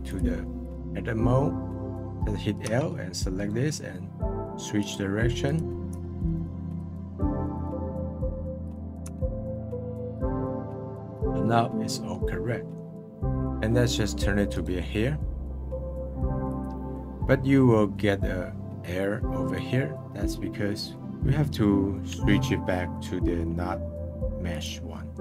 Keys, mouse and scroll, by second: 0.6-1.8 drag, 1.8 right click, 2.6 l, 3.3-5.4 right drag, 5.4 click, 5.9 l, 6.2-7.5 right drag, 7.5-9.0 drag, 9.0 l, 9.4-10.5 right drag, 10.5 scroll down 1, 10.8-12.1 middle drag, 12.6 middle click, 14.5-24.5 right drag, 24.5 click.